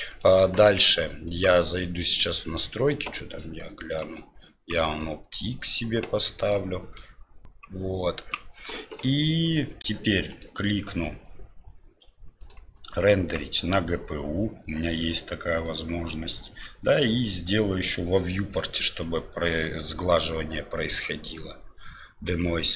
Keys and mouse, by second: 0.2-1.1 drag, 1.4-2.6 drag, 12.5-13.3 drag, 15.6 click, 17.2 click.